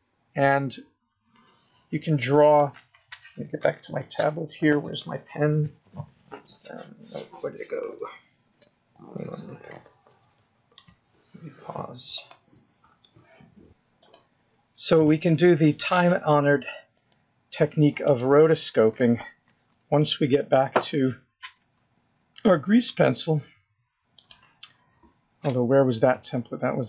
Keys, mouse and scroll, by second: 1.4 shift+middle click, 2.4-3.2 scroll up 1, 18.8 click, 22.3-23.0 scroll down 3, 23.0-23.6 scroll down 2, 23.6-26.0 scroll up 5, 26.0 click, 26.7-26.8 scroll down 10.